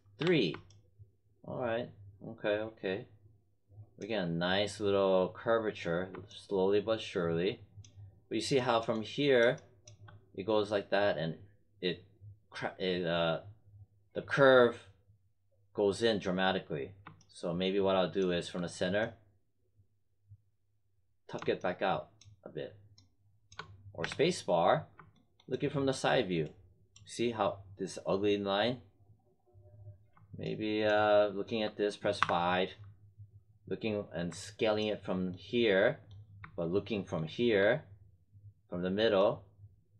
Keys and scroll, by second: 0.1 3, 24.0 space, 32.1 5.